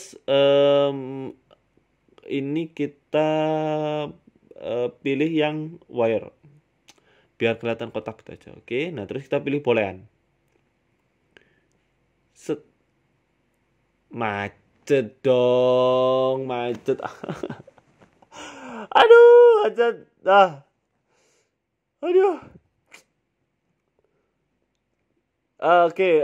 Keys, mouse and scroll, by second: 0.4 right click, 1.9 click, 2.6 click, 4.0 click, 4.1 scroll down 4, 4.2 scroll up 1, 4.9 click, 6.3 middle click, 7.0 right click, 7.8 click, 10.3 click, 10.8-11.4 scroll down 2, 11.4 click.